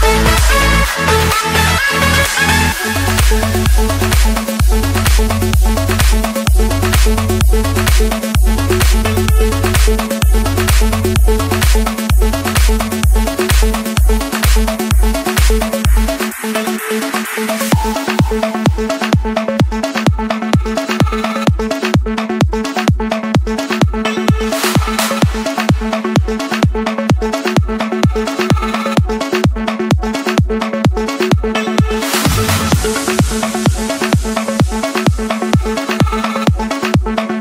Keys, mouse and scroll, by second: 1.3 click, 1.9 click, 2.2-2.5 scroll down 5, 2.5 scroll up 1, 2.6-3.9 scroll, 4.1 click, 4.5-5.0 scroll, 5.0 Escape, 5.6-6.0 scroll, 6.5 middle click, 6.5-7.0 typing, 8.6-9.8 drag, 15.6-16.6 drag, 17.8 click, 18.4 click, 21.2-21.5 typing, 22.4 Return, 23.6 Escape, 25.3 click, 26.1 click, 26.3-27.0 scroll, 27.4 click, 29.0 click, 29.5-29.8 scroll, 29.8 Escape, 30.3 click, 30.7 click, 32.1 click, 32.3 shift+click, 33.7 shift+click, 34.0 ctrl+1, 37.3-37.4 drag.